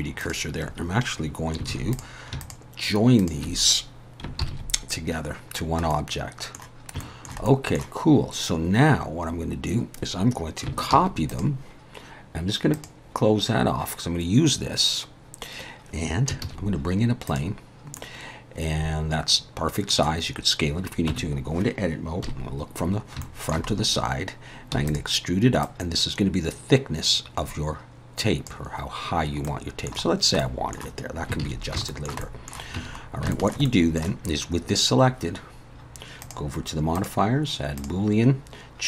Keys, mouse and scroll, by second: 1.7 alt+a, 1.9 click, 2.4 shift+click, 3.2 click, 4.4 ctrl+j, 5.6 scroll down 1, 5.9 middle click, 7.0 shift+middle click, 7.5 middle click, 9.6-10.1 scroll up 1, 10.9 shift+d, 12.7 click, 16.4 shift+a, 18.0 middle click, 21.1 Tab, 22.3 KP_1, 22.9 scroll up 2, 23.2 shift+middle click, 23.7 scroll up 3, 24.8 e, 25.6 click, 29.5 middle click, 30.1 scroll down 2, 30.4 middle click, 31.4 alt+a, 31.9 shift+middle click, 32.2 middle click, 32.8 Tab, 33.0 scroll down 2, 33.3 shift+middle click, 33.6 middle click, 36.2 click, 36.9 click.